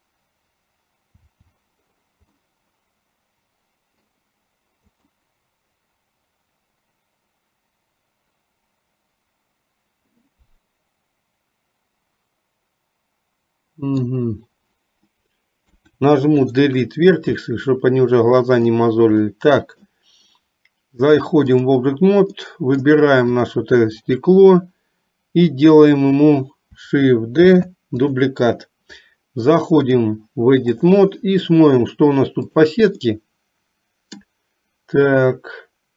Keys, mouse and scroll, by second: 1.3 l, 2.6-4.4 middle drag, 5.3-14.4 middle drag, 15.7 Delete, 17.7-18.8 middle drag, 19.3 middle click, 21.3 click, 22.5 middle click, 23.5 click, 27.6 shift+d, 30.0-31.1 drag, 32.7 click, 33.4-34.5 middle drag.